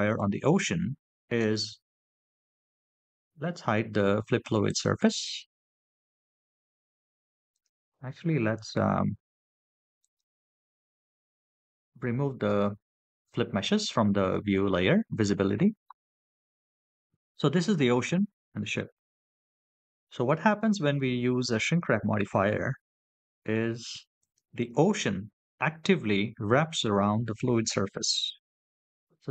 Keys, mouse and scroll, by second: 2.3-4.5 scroll up 4, 4.5 click, 7.3 click, 10.2 click.